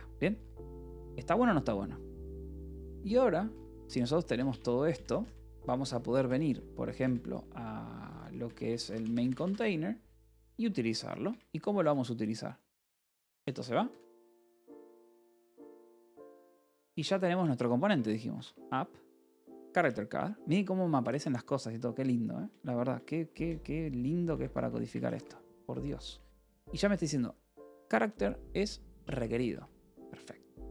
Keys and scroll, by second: 0.2 k, 0.9 j, 2.5-10.2 typing, 10.8 ctrl+p, 11.1 Return, 11.6-13.8 typing, 14.4 Escape, 14.8 a, 15.4 Escape, 15.7 l, 16.0 BackSpace, 16.1 Escape, 16.5 a, 16.8 Return, 18.0-18.8 typing, 19.6 ctrl+n, 19.8 Return, 20.9 space, 23.0 /, 24.3 Escape, 24.5 h, 25.7-26.6 typing, 29.0-30.7 typing.